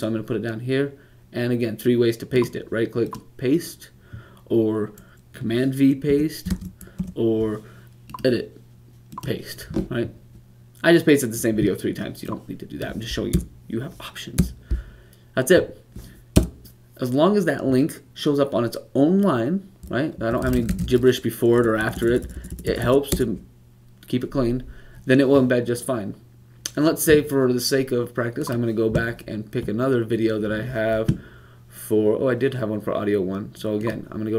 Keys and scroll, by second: 6.4 v, 19.9 Up, 20.6 typing.